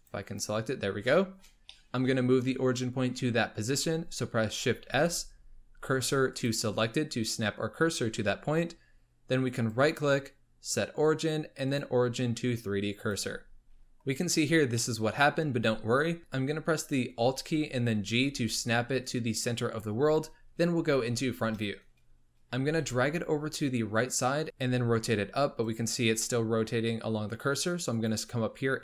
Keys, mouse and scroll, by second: 0.2 click, 1.0-4.7 shift+middle drag, 4.8 shift+s, 8.2 Tab, 9.5-12.6 right drag, 13.8-16.2 middle drag, 18.1 alt+g, 21.0 KP_1, 22.6 g, 24.4 r, 24.6 r, 27.8-28.8 drag.